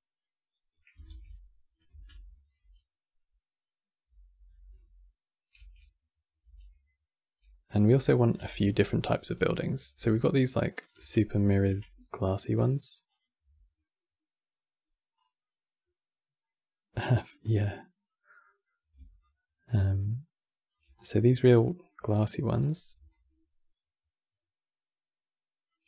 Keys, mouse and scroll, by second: 0.8 shift+f, 1.2 middle click, 14.9 scroll down 2, 15.1-16.8 middle drag, 16.8 scroll down 1, 17.0 middle click, 17.7-18.1 scroll down 4, 18.1 middle click, 18.9-20.7 shift+drag, 20.7 scroll down 3, 20.8-22.3 middle drag, 22.3 scroll up 5, 22.8-25.8 shift+drag.